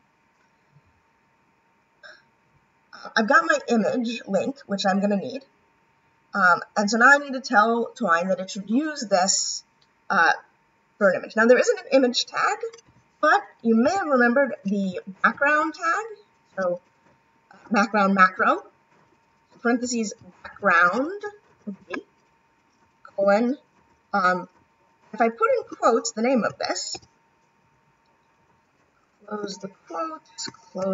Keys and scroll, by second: 15.3 shift+9, 18.9 shift+9, 23.1 shift+;, 30.8 shift+0.